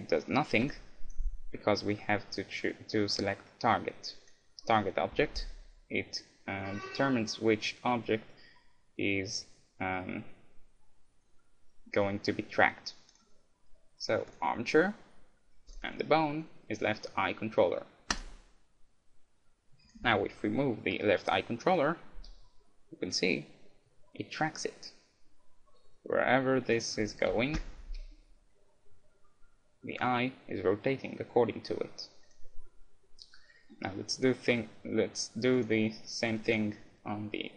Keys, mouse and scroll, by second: 0.7-2.8 right drag, 3.2-5.0 drag, 13.1-14.9 drag, 15.7-17.6 drag, 19.8-21.9 right drag, 22.2 g, 27.3 KP_1, 27.9 g, 32.3-34.0 right drag, 32.7-34.5 middle drag, 35.5-37.4 right drag, 36.5-37.5 drag.